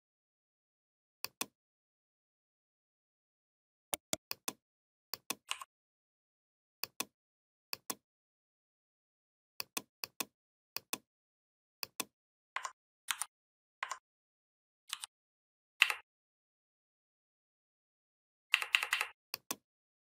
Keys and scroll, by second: 12.8 ctrl+c, 14.7 ctrl+f, 15.6 Up.